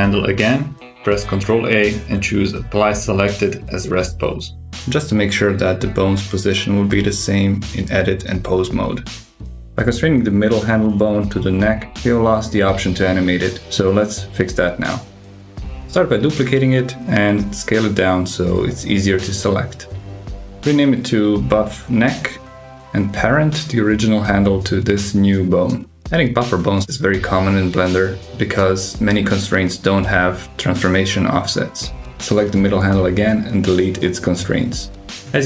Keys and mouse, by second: 0.2 super+KP_6, 0.5 click, 1.5 ctrl+a, 5.7 super+KP_6, 9.5 click, 10.5-11.6 drag, 12.3 shift+d, 13.3 s, 14.3 ctrl+alt+s, 16.8 F2, 18.5 shift+f, 22.1 click, 23.0 shift+click, 24.0 ctrl+p, 28.2 click, 28.5-29.5 drag, 30.6 click, 31.1 click, 33.5 click, 34.8 click, 35.2 g.